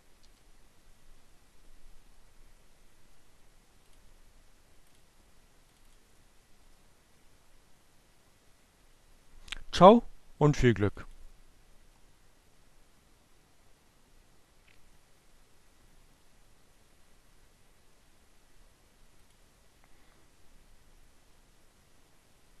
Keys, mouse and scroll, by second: 3.2 click, 4.0 click, 9.1-10.7 drag, 18.5 click.